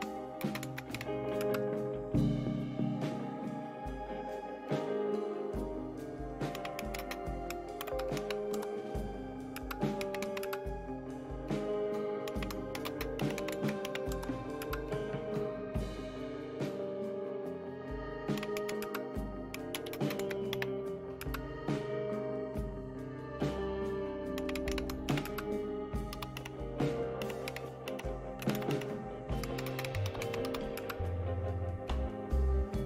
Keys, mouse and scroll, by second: 0.0-1.4 typing, 6.3-10.7 typing, 12.0-14.3 typing, 14.6 Return, 18.1-21.2 typing, 24.1-30.9 typing.